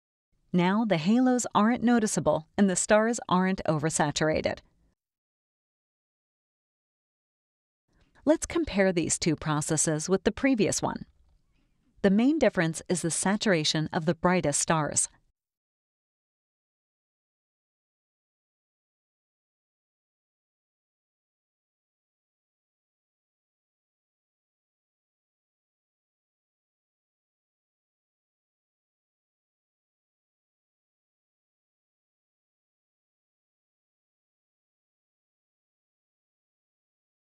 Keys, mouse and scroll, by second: 0.8 click, 4.7 click, 5.3 click, 6.1 click, 6.8 click, 7.9 click, 8.6 click, 9.7 click, 10.3 click, 12.3-14.1 drag, 14.4 click, 16.0 ctrl+Right, 16.6 ctrl+Left, 17.4 ctrl+Right, 18.0 ctrl+Left, 18.7 ctrl+Right, 19.2 ctrl+Left, 20.0 ctrl+Right, 22.3 scroll up 1, 22.3 scroll down 2, 22.8 scroll up 2, 22.9 scroll down 2, 23.2 space, 23.3-24.4 drag, 24.6 click, 26.6-28.0 drag, 28.2 click, 29.1 ctrl+Right, 30.8 ctrl+Left, 31.3 ctrl+Right, 32.2 ctrl+Left, 33.0 ctrl+Right, 33.7 ctrl+Left, 34.3 ctrl+Right, 35.5 ctrl+-.